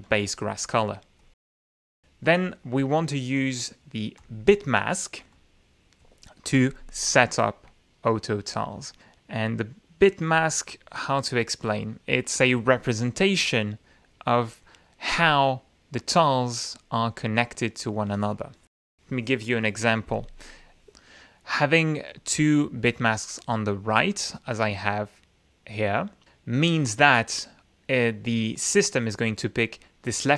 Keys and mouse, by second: 0.5 ctrl+z, 1.6 click, 2.7 click, 4.6 click, 5.7 click, 11.4 click, 12.1 click, 12.4 click, 14.2-17.3 drag, 17.5 click, 22.1 click, 22.5 click, 23.3 right click, 23.9-25.0 right drag, 25.0-26.6 right drag.